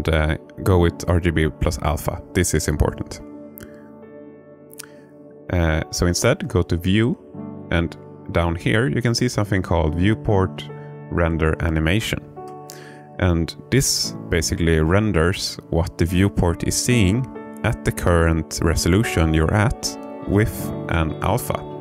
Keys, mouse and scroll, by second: 6.9-21.8 drag.